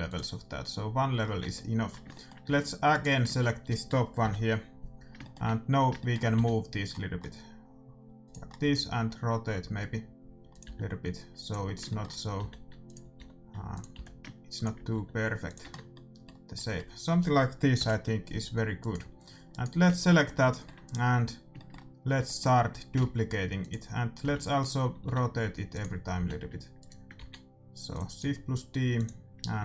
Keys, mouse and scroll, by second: 1.3 Tab, 2.4 a, 2.8-4.6 right drag, 4.6 middle click, 6.3 g, 6.6-8.0 middle drag, 8.4-10.4 middle drag, 8.6 r, 10.6 g, 11.6-14.1 middle drag, 12.3 g, 13.1 r, 13.9 g, 14.9 r, 15.6 Tab, 15.7-16.7 middle drag, 19.1-20.4 right drag, 19.8-22.5 middle drag, 22.9 shift+d, 24.2 g, 25.0 r, 26.1 g, 27.1 shift+d, 28.1 r.